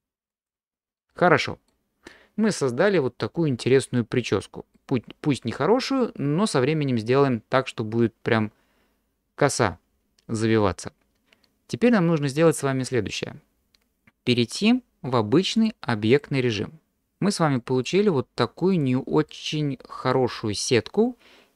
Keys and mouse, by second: 0.3 click, 1.1 middle click, 4.0 middle click, 15.6-17.0 drag, 17.6 middle click, 18.8 click, 19.3-20.1 middle drag, 20.6-21.5 middle drag.